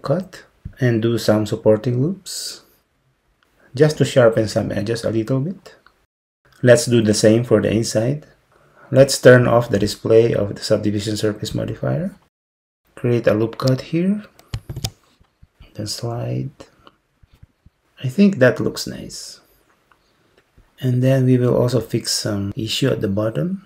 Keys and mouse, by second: 11.6 click, 14.7 ctrl+r.